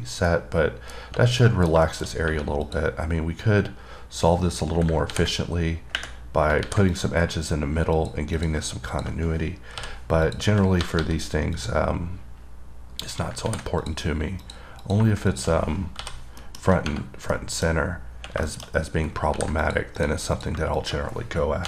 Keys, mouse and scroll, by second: 0.3 scroll down 1, 0.5 middle click, 1.3 scroll up 3, 1.7 middle click, 2.1 double middle click, 2.9 click, 7.2 click, 8.2 click, 8.6 click, 9.2 click, 10.5 click, 11.8 click, 12.5-13.2 scroll up 2, 13.2-13.7 scroll down 2, 14.1 click, 14.7 click, 15.1 click, 15.5 click, 16.7 middle click, 17.3 scroll down 2, 17.6 middle click, 18.0 scroll down 1, 18.4 scroll up 2, 18.7 middle click, 18.9-19.4 scroll up 3, 19.9 click, 20.2 click, 20.6 click, 21.0 click.